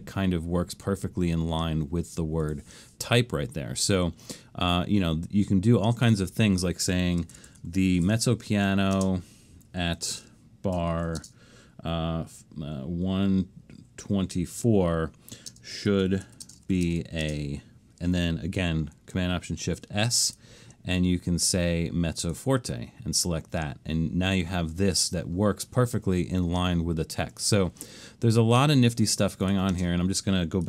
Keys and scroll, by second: 7.1-11.6 typing, 8.2 Right, 8.4 Right, 13.1 typing, 14.2-17.5 typing, 19.8 alt+shift+super+s, 29.8 space.